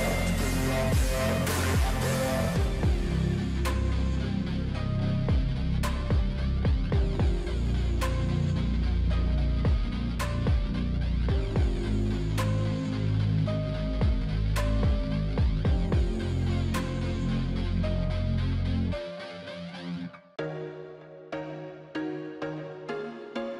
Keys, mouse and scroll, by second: 1.1 shift+click, 4.0 scroll up 6, 4.2 shift+click, 5.1 shift+click, 5.4 ctrl+t, 6.4 shift+click, 10.1 double click, 11.1-11.9 scroll up 13, 12.8 right click, 20.8 ctrl+t.